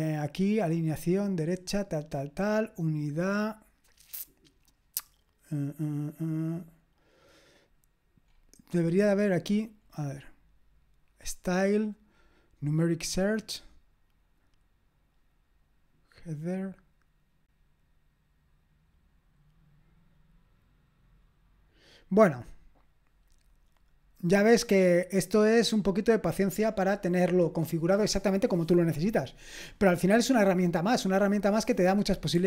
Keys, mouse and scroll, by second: 6.4-8.3 scroll up 1, 8.3-15.7 scroll up 1, 15.7-17.5 scroll up 1, 17.5-18.4 scroll up 1, 18.4-20.4 scroll up 1, 20.4-21.8 scroll up 1, 21.8-23.5 scroll up 1, 23.5 click, 24.1-32.3 scroll down 1, 32.3 q.